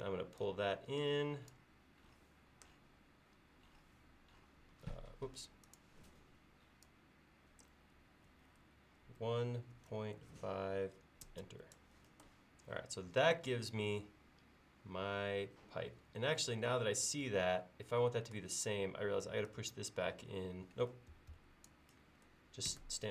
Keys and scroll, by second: 9.1-10.3 typing, 11.3 Return, 21.2 Escape, 21.3 Escape, 22.7 p.